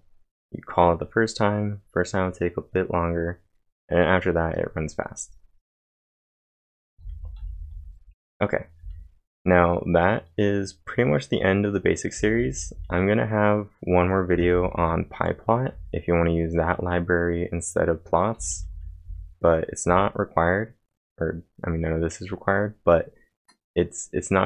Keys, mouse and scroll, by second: 6.6-8.8 typing, 12.1 typing, 18.3 typing.